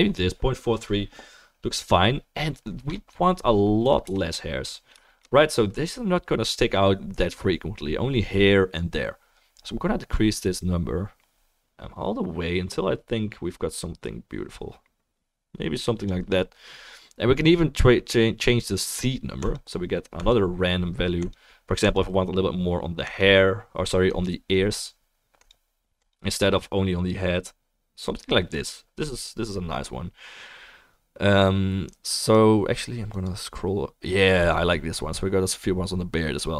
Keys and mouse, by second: 4.0 KP_0.